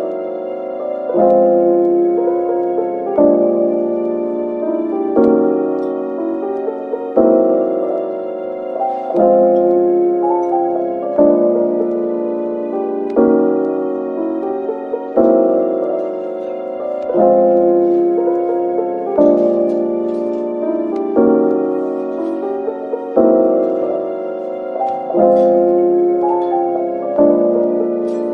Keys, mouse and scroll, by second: 1.1 ctrl+r, 1.4 scroll up 1, 2.2 double click, 3.5 shift+click, 4.3 middle click, 6.7 shift+click, 7.0 middle click, 7.4 typing, 9.7 typing, 12.8 Tab, 13.3 middle click, 14.7 Tab, 15.4 middle click, 16.5 typing, 17.3 shift+click, 19.6 typing, 21.5 typing, 24.1 Tab, 24.5 middle click, 28.2 Tab.